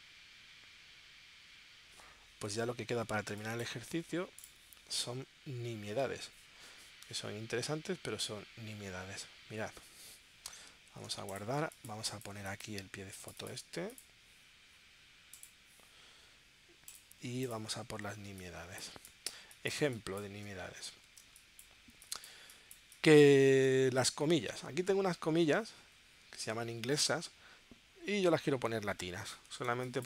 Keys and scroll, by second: 10.9 super+s, 11.7 space, 18.4 space, 21.2 space, 29.8 space.